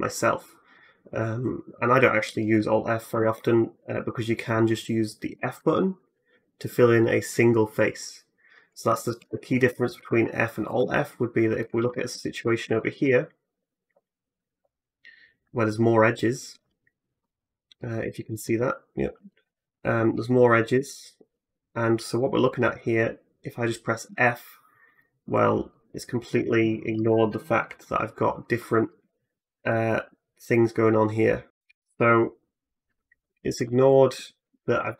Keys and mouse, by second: 2.9 ctrl+z, 5.1 f, 9.0 ctrl+z, 9.4 Tab, 10.5 middle click, 10.5 right click, 11.6 Tab, 23.9 f, 24.8 middle click, 24.8 right click.